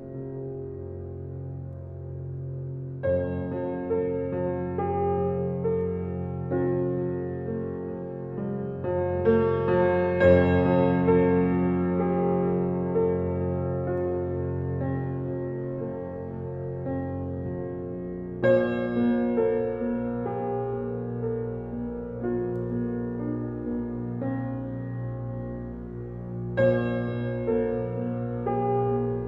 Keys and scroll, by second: 5.8 shift+a, 13.1 s, 13.3 t, 13.7 a, 14.2 m.